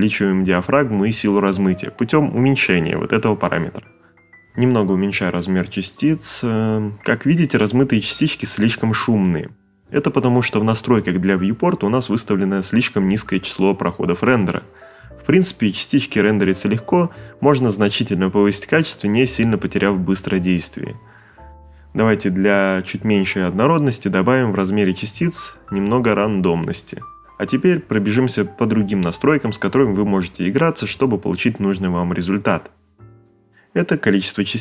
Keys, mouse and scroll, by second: 2.3 middle click, 5.3 click.